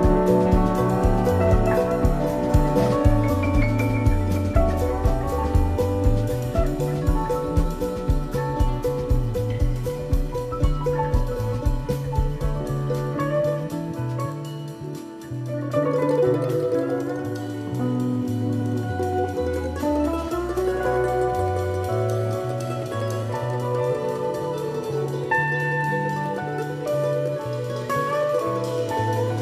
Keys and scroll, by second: 1.0 super+=, 4.2 shift+Down, 5.8 shift+Up, 8.7 shift+Down, 11.8 Up, 12.5 Down, 13.6 Up, 22.4 super+-, 23.4 i, 28.5 super+=.